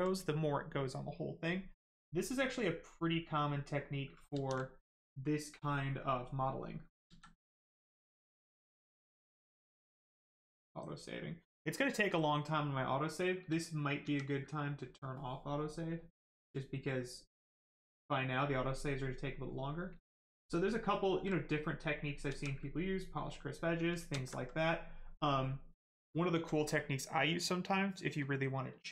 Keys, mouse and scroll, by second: 2.0 right click, 4.3 z, 5.9 right click, 7.0 ctrl+z, 12.8 right click, 14.0 ctrl+z, 14.5 right click, 15.9 click, 18.9 right click, 22.2 ctrl+z, 23.6 right click, 24.1 alt+right click, 24.5 right click, 26.1 alt+right click.